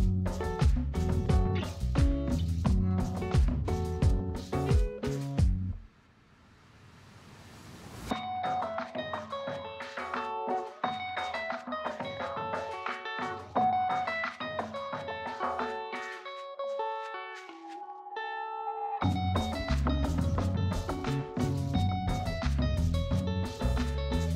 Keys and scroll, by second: 3.5 space, 13.4 space, 18.5 space, 23.5 space.